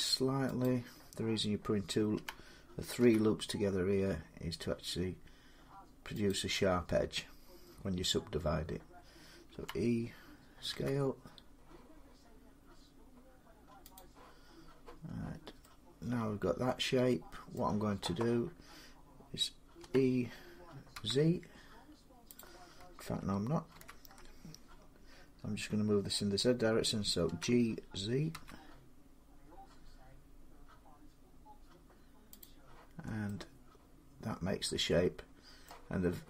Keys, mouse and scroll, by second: 2.0-2.8 typing, 4.2-5.5 drag, 6.1-11.2 drag, 9.3 e, 10.5 s, 13.8-17.4 drag, 17.4-22.2 middle drag, 19.6 e, 20.8 z, 22.2-28.7 drag, 23.6 ctrl+z, 27.1 g, 28.2 z, 32.2 click, 32.9 scroll, 35.5 middle click.